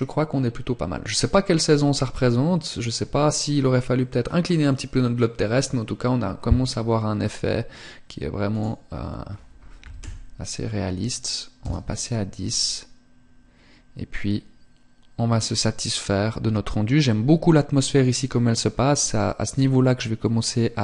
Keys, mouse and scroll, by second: 8.0 click.